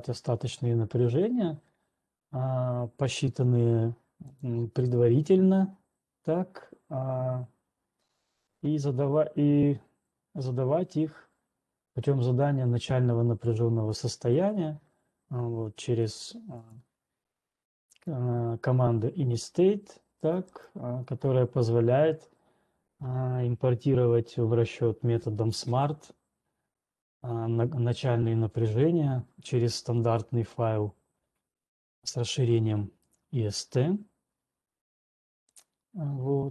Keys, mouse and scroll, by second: 4.7 click, 5.2-5.7 scroll down 2, 14.8 click, 16.3 ctrl+scroll, 17.3 click, 18.2 click, 20.2 right click, 20.9 click, 21.4 right click, 32.7 right click, 33.4 alt+Tab, 35.8 alt+right click.